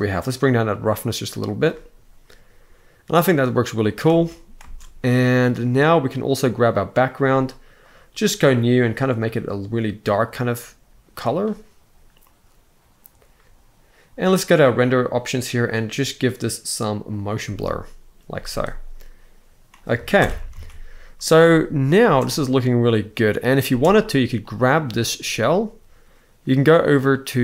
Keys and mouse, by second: 3.7 space, 4.2 space, 6.2 click, 8.3 click, 14.3 click, 16.8 click, 17.9 z, 19.8 shift+Left, 20.3 ctrl+s, 21.7 space, 23.3 space, 24.1 click.